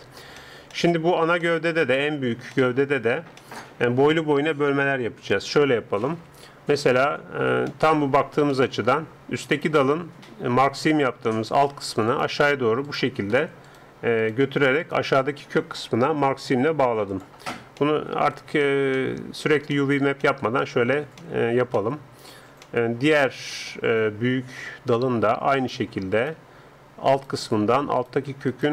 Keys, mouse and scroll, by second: 6.0 ctrl+Up, 7.7 middle click, 9.4-11.4 middle drag, 12.1-17.1 right drag, 17.1-18.9 drag, 17.8-25.5 middle drag, 25.6-28.7 right drag.